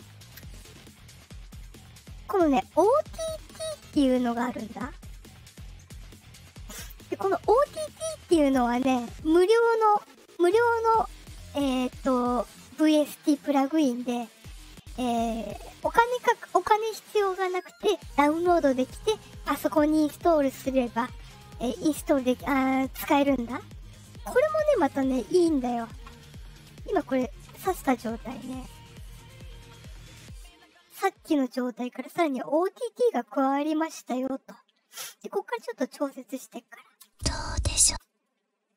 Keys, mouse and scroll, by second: 3.1-5.0 drag, 6.9-8.3 drag, 23.9 click, 28.2 click, 30.2 click, 30.5-31.3 scroll down 4, 32.9 click, 35.4-36.7 drag, 36.9 space, 37.8 space.